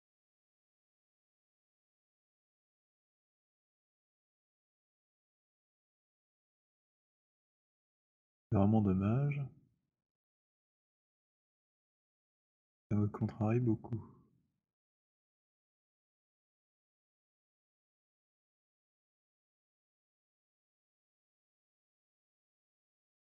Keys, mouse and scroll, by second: 1.6 click, 6.6 alt+click, 12.4 click, 13.1-15.4 drag, 13.1-19.6 typing, 16.9 middle click, 19.6 middle click, 22.2 alt+click, 22.4 z, 23.1 z.